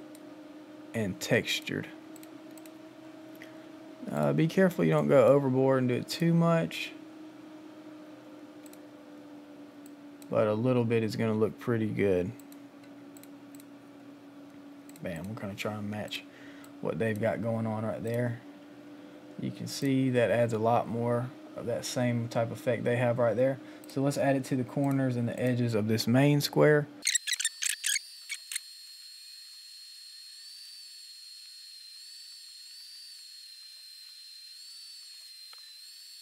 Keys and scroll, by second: 16.4 space, 27.1 [, 27.4 ctrl+z, 28.0 [, 28.6 ], 29.5 ctrl+z, 31.9 ctrl+z, 32.3 ctrl+z, 33.6 ctrl+z, 34.0 ctrl+z, 35.0 ctrl+z, 35.2 [, 35.4 ], 36.0 ].